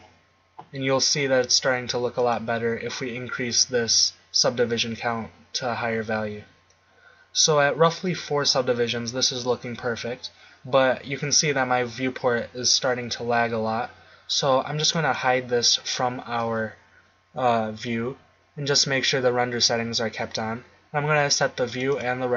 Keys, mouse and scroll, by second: 22.1-22.3 drag.